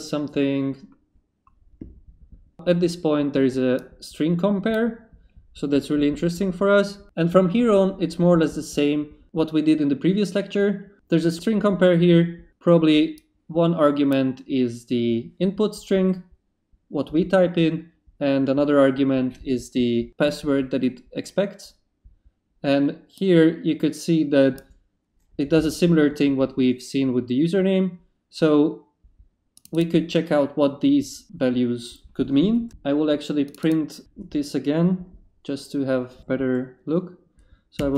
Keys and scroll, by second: 37.5-37.9 typing.